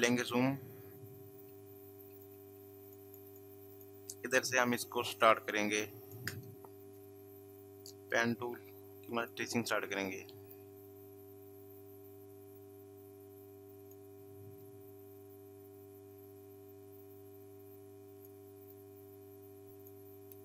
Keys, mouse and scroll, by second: 0.2 ctrl+space, 1.9 ctrl+click, 2.0 ctrl+space, 2.1 ctrl+click, 3.0 ctrl+click, 3.2 ctrl+space, 5.0 space, 5.1 click, 5.5 space, 9.1 click, 13.7 click, 13.8 click, 18.2 click.